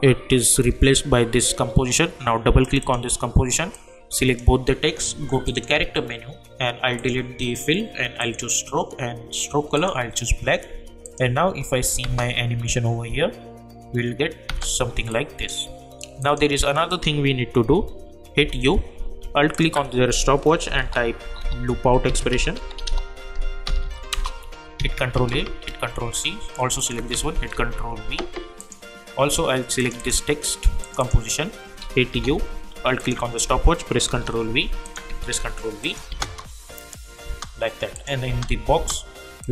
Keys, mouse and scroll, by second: 2.6-5.4 drag, 12.0 space, 14.4 space, 15.1 click, 18.3 u, 19.5 alt+click, 20.4-23.3 typing, 23.6 Down, 24.1 Return, 24.8 ctrl+a, 25.6 ctrl+c, 26.8 alt+click, 27.5 ctrl+v, 28.6 click, 32.1 u, 33.0 alt+click, 34.0 ctrl+v, 34.8 alt+click, 35.3 ctrl+v, 35.8 click, 36.1 space, 37.9 click, 38.2 space, 39.4 click.